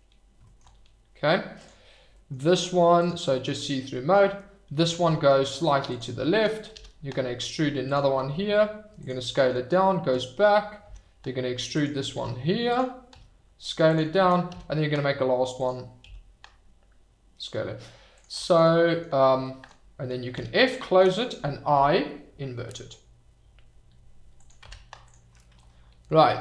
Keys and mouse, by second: 0.5 middle click, 1.6 click, 2.9 click, 3.0 middle click, 5.0 g, 5.9 click, 6.7 e, 7.8 click, 8.2 s, 9.0 click, 10.8 e, 11.7 click, 12.1 r, 12.7 click, 13.1 s, 13.8 click, 14.5 e, 15.5 click, 16.0 s, 18.1 click, 18.7 click, 20.3 f, 21.7 i, 24.4 click, 24.6 Tab.